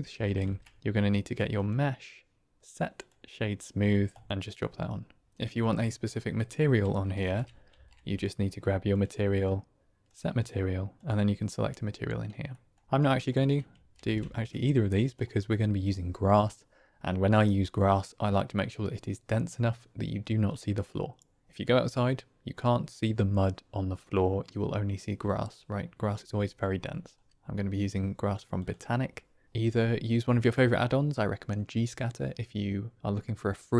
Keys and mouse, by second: 0.3 shift+a, 4.3 click, 7.8 shift+a, 10.8 click, 12.5 click, 12.8-13.2 drag, 13.3 click, 13.9 ctrl+x, 28.6-33.7 drag.